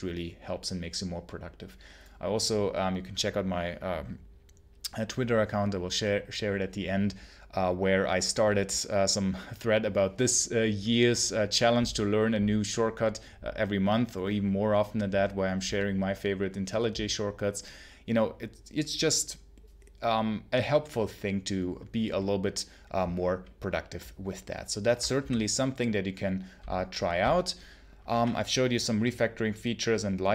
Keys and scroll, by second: 25.1 ctrl+h.